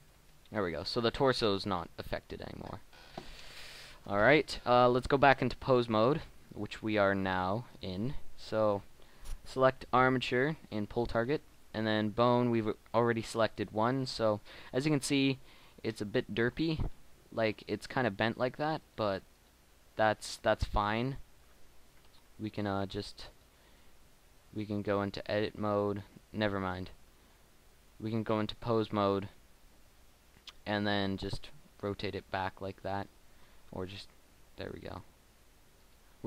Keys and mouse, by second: 4.1 Tab, 14.3 right click, 22.5-24.5 right drag, 22.5 r, 32.0 r, 32.1 middle click, 34.2 KP_1, 34.7 r, 34.8-35.9 middle drag.